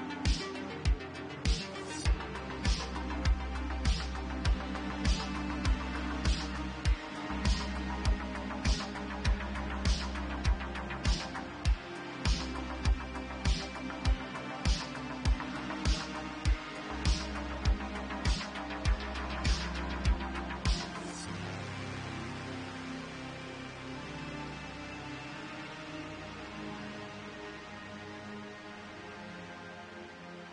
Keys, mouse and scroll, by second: 0.1 shift+click, 0.2 shift+middle click, 0.3-1.2 drag, 0.3 1, 1.0 ctrl+x, 1.4 click, 1.7 g, 2.6 click, 3.2 click, 4.4 1, 5.8 g, 7.1 shift+click, 7.4 1, 7.8 click, 12.5 click, 12.8 shift+click, 14.1 j, 14.4 click, 15.3 g, 15.9 click, 16.4 shift+click, 16.9 1, 17.4 ctrl+z, 17.9 h, 18.8 ctrl+z, 19.3 j, 19.7 Tab, 20.4 click, 20.8 ctrl+x, 21.1 click, 21.5 ctrl+x, 21.8 Tab, 22.7 middle click, 23.8-26.4 middle drag, 25.3 Tab, 26.4 click, 26.8 shift+click, 27.1 j, 28.0 g, 29.0 click, 29.8 ctrl+z, 30.3 g.